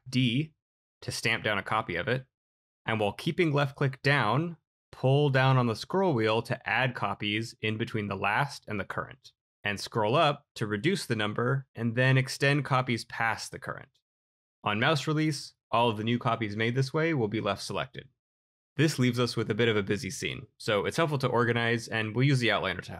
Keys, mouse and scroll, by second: 1.8 d, 5.8-6.4 scroll.